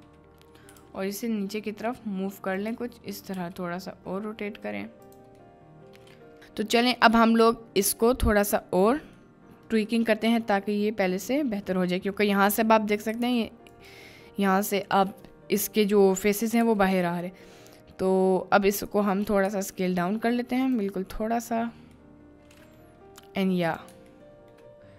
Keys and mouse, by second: 0.7 g, 0.8 z, 2.6 click, 3.3 r, 5.1 click, 5.5-6.2 middle drag, 6.5-6.8 middle drag, 7.4-7.9 middle drag, 8.5 middle click, 9.1-9.7 middle drag, 10.1-10.8 middle drag, 11.4 middle click, 12.6 middle click, 13.1 s, 13.3 x, 16.5 s, 19.4 s, 21.2-21.7 middle drag, 22.1-22.8 middle drag, 23.6 middle click, 24.2-24.5 shift+middle drag.